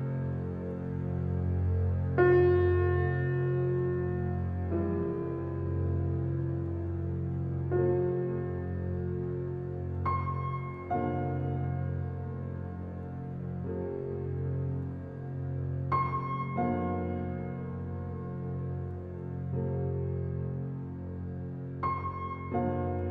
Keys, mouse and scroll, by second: 0.0 shift+middle click, 0.4-1.0 scroll down 2, 1.0-2.5 shift+drag, 3.1 middle click, 3.8-4.1 scroll up 2, 4.1-5.7 shift+middle drag, 5.7 shift+click, 6.1-10.0 middle drag, 10.0-11.8 shift+drag, 11.8-13.8 middle drag, 13.8-15.4 ctrl+drag, 18.1 ctrl+click, 19.0 middle click, 19.9-20.2 scroll down 2, 20.2-21.6 shift+middle drag, 21.6 p, 22.2 Tab, 22.7 Tab, 23.0-23.1 drag.